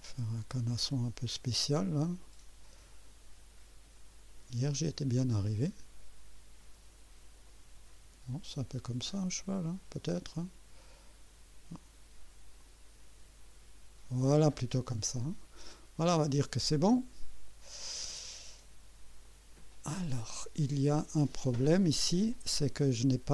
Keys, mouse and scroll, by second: 0.4-4.1 drag, 4.7-10.9 drag, 12.6-14.6 drag, 19.2 click.